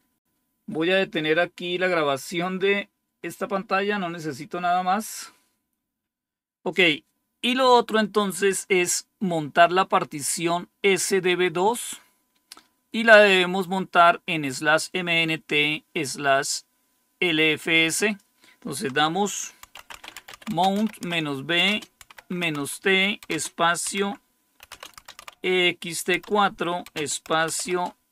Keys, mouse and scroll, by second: 11.1-19.6 drag, 19.3-28.1 typing.